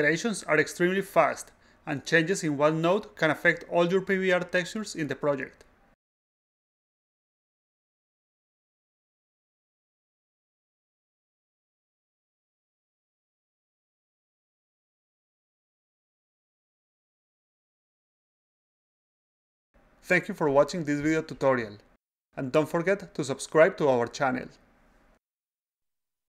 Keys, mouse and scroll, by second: 0.0-1.3 typing, 2.7 click, 3.6 click, 4.2-4.6 drag, 5.1-6.5 drag, 7.0 drag, 7.7-9.0 drag, 10.6-15.2 drag, 15.2 a, 15.2-15.7 drag, 15.8 s, 15.9-18.0 drag, 18.7-19.9 drag.